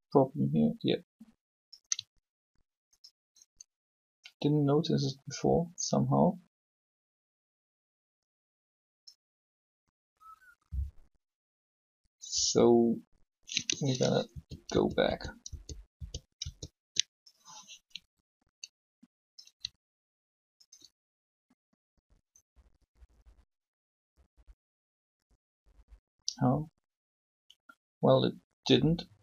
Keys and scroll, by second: 14.3 ctrl+z, 16.3 ctrl+z.